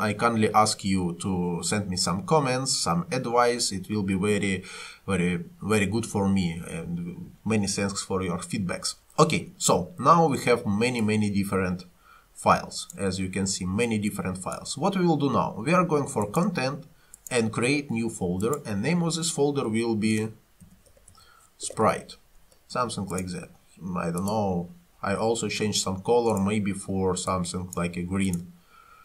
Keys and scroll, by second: 19.9-22.3 typing.